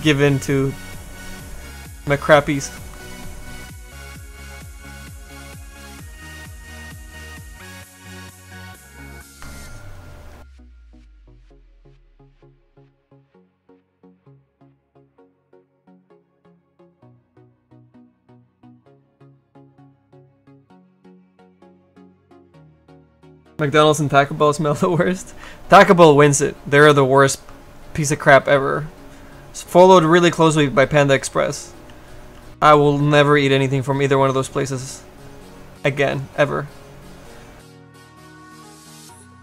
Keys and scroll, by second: 30.4 s, 31.8 s, 32.3 s.